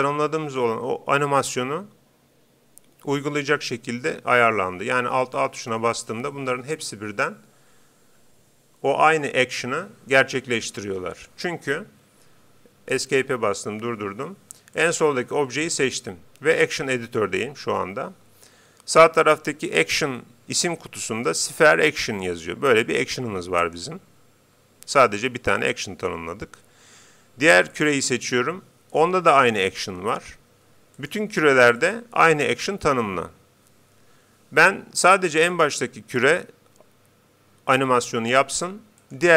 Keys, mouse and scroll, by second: 5.4 alt+a, 12.5 Escape, 14.7-16.5 right drag, 23.6-25.2 drag, 27.7-29.3 right drag, 31.0-34.2 right drag, 35.5-37.2 right drag, 39.0-39.3 right drag.